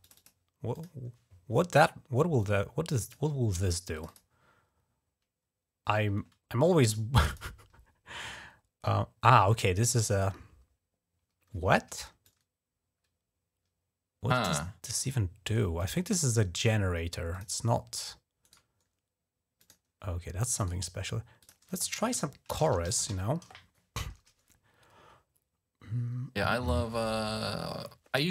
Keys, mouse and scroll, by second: 0.0 click, 0.6 click, 2.2 click, 3.8 click, 7.1 click, 9.1 click, 12.1-14.3 drag, 15.6 click, 15.8 click, 17.1 click, 18.3 right click, 19.4 click, 20.5 right click, 21.3 click, 22.1-23.4 typing.